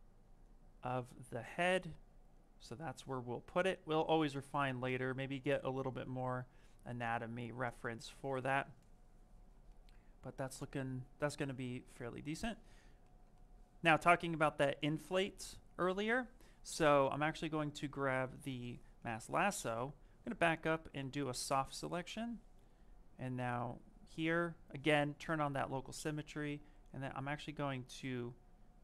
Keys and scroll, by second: 16.0 ctrl+z, 20.9 ctrl+space.